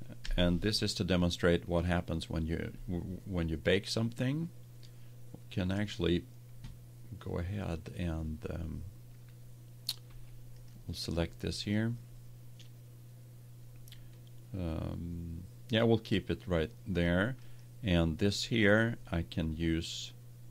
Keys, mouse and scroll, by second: 0.2 KP_1, 10.0 Tab, 17.3-19.3 right drag.